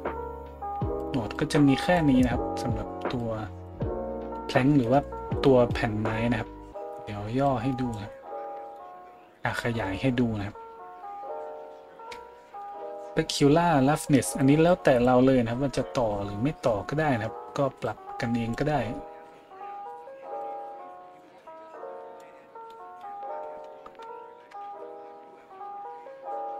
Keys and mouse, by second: 1.0 middle click, 1.4-20.5 drag, 20.5-21.2 middle drag, 21.2-26.5 drag.